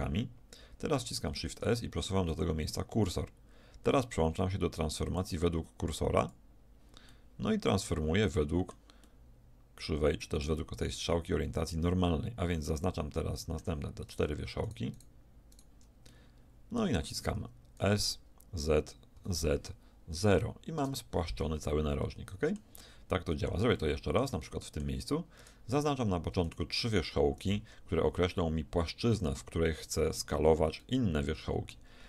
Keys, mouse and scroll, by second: 1.3 shift+s, 5.1-6.8 drag, 7.1 middle click, 7.6 middle click, 7.8 middle click, 8.4 middle click, 9.7-10.9 middle drag, 12.7-16.8 middle drag, 16.8 click, 16.9 middle click, 17.1 click, 17.8 middle click, 17.9 s, 22.1-23.1 middle drag, 23.8-24.8 middle drag, 24.9 middle click, 25.5 click, 26.1-29.3 right drag, 30.8-32.0 middle drag.